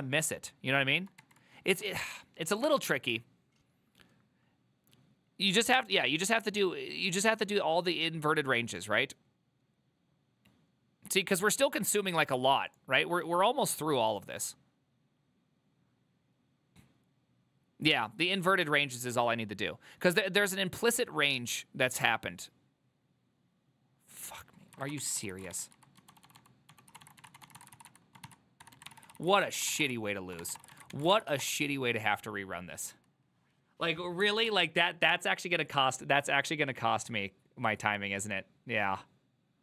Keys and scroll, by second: 1.3 1, 2.0 ctrl+a, 2.8 2, 25.3 ctrl+c, 25.4 ctrl+c, 25.6-31.0 typing, 30.6 Return, 30.8 ctrl+a, 31.2 ctrl+c, 31.4 Up, 31.5 Return, 34.5 alt++.